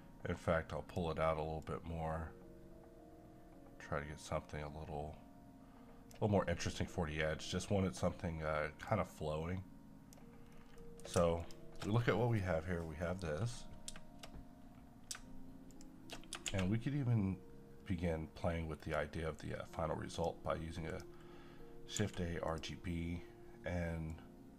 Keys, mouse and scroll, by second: 2.0-6.5 drag, 6.5 scroll down 1, 8.8-10.5 drag, 10.5 scroll down 1, 10.8 middle click, 11.4 click, 16.5 a, 20.1 click, 22.0 g, 22.5-24.5 drag.